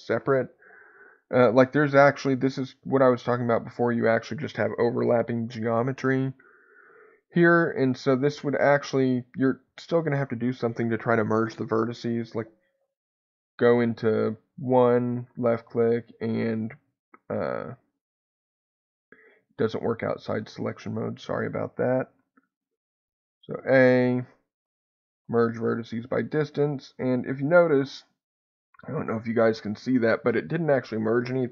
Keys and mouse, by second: 14.5 1, 15.1-20.3 right drag, 20.3 click, 22.4 click, 25.2-26.9 right drag.